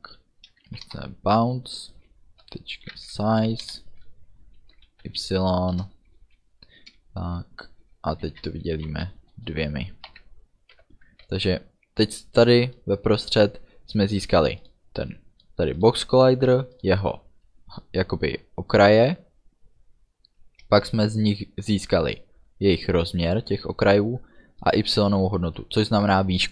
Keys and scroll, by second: 0.7 Down, 0.9 Return, 3.7 Return, 5.8 Return, 8.3 space, 8.8 -, 9.4 space, 9.6 2, 10.1 Right, 10.8 ů, 11.3 ctrl+s.